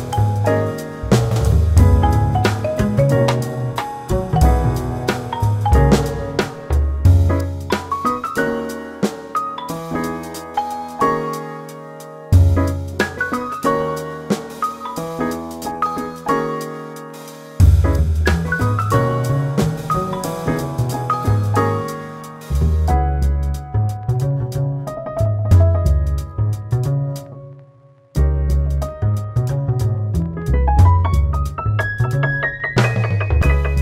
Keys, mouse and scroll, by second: 4.8 double click, 5.6 click, 9.9 q, 10.6 click, 11.1 alt+middle click, 12.3 q, 13.2 alt+middle click, 14.1 click, 18.1 double click, 18.7 click, 20.0 double click, 23.7 click.